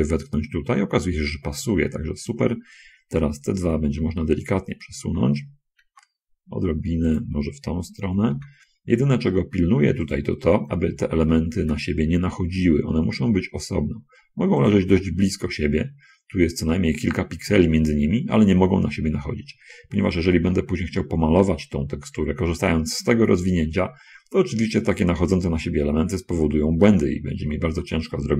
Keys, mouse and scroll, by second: 2.6 click, 4.3 l, 5.9 g, 8.4 l, 8.7 g, 11.3 l, 15.5 middle click, 18.5-19.1 scroll up 1, 20.1 scroll up 1, 20.8 middle click, 27.7 l.